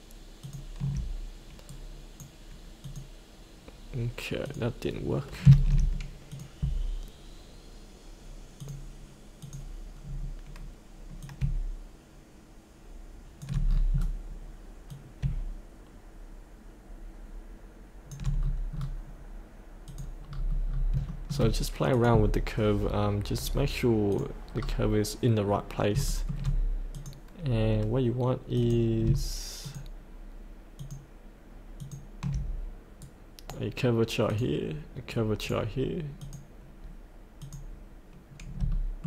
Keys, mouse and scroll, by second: 0.4 ctrl+click, 1.6-2.8 right drag, 2.8 click, 6.3 click, 10.0 scroll down 1, 11.1-13.4 drag, 13.6 scroll down 1, 14.8-18.1 drag, 18.3-19.8 scroll up 2, 19.8 click, 20.2 scroll up 1, 21.1 shift+middle click, 21.9 click, 23.3-24.1 scroll up 1, 24.1 click, 24.5 scroll down 1, 26.0 shift+middle click, 26.9 click, 29.6 ctrl+click, 30.7 ctrl+click, 31.8 ctrl+click, 33.0-34.2 right drag, 34.2 click, 35.1 right click, 36.1 click, 38.7 shift+middle click.